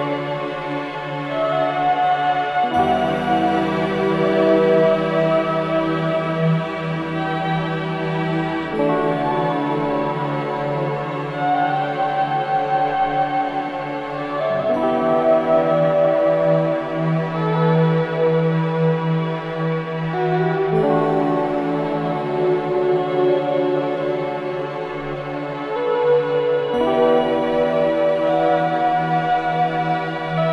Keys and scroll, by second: 0.0 3, 2.6 4, 6.0 F3, 9.5 2.